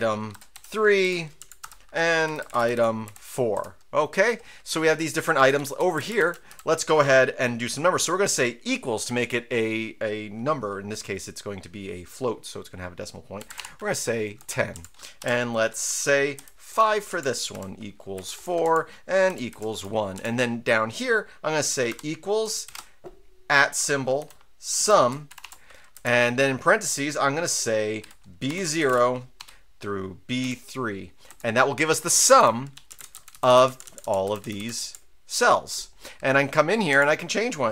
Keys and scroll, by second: 0.0-3.7 typing, 5.4 Right, 5.6 Right, 5.8 Up, 5.9 Left, 6.2 Up, 6.5 Up, 13.1-14.0 typing, 14.4 Return, 14.7 Down, 15.2 typing, 16.3 typing, 16.7 Return, 17.1 Down, 17.5-18.1 typing, 18.3 Return, 18.6 Down, 19.3 typing, 19.7 Return, 20.1 Down, 21.9-22.6 typing, 23.9-25.4 typing, 25.9 Left, 27.8-29.4 typing, 30.4 typing, 31.3 Return, 32.1 Up, 32.4 Up, 32.7 Right, 32.9 Down, 33.0 Left, 33.1 Up, 33.3 Up, 33.5 Up, 33.6 Down, 33.8-34.8 typing, 34.6 Up, 34.8 Down, 36.9 Down.